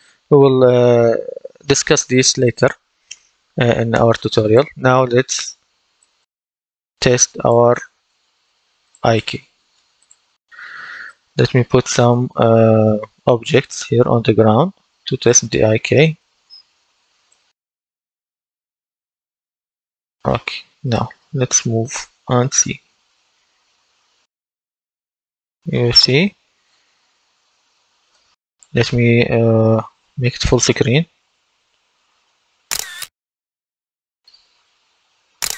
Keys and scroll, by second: 11.5 d, 12.0 w, 12.6 w, 13.2 s, 22.1 w, 24.4 w, 32.5 F11, 35.3 F11.